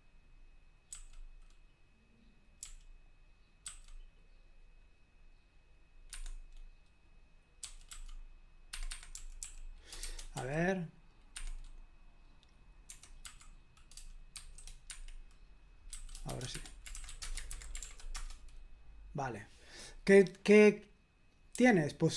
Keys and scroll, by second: 0.0-0.9 typing, 2.6 i, 3.6 a, 6.1 Escape, 7.4-10.4 typing, 8.7 Escape, 8.9 Escape, 11.3 Escape, 12.6-14.3 typing, 14.9 Escape, 15.9-17.4 typing, 16.5 Escape, 17.5 super+h, 17.8 ctrl+p, 18.1 Return, 21.5 j.